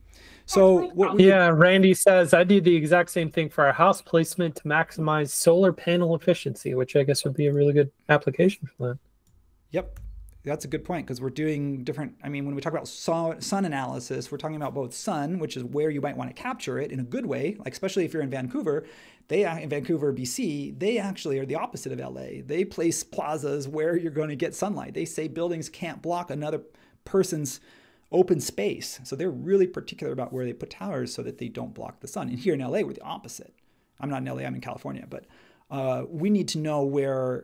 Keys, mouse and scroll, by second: 9.5-10.4 typing, 10.6 Tab.